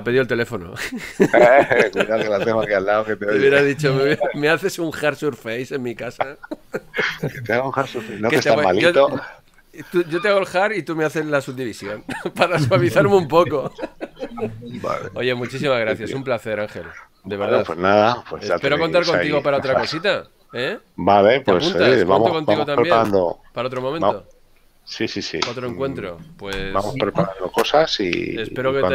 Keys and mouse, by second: 1.2 click, 5.3 click, 7.0 click, 14.0 click, 15.7 click, 22.7 middle click.